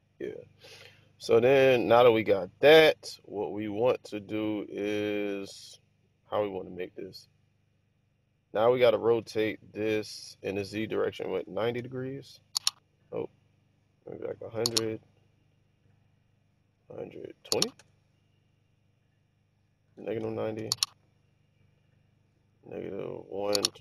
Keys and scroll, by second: 6.4-7.1 typing, 11.4-11.8 typing, 14.0-15.0 typing, 16.9-18.0 typing, 19.7-21.1 typing, 22.6-23.8 typing.